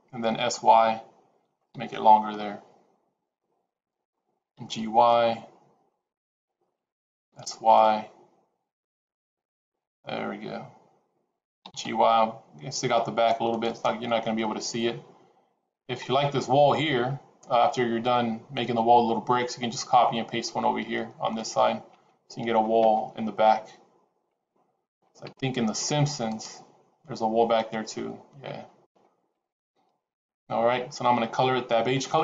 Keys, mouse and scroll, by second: 1.4 s, 4.4 g, 7.1 s, 11.6 g, 14.1 middle click.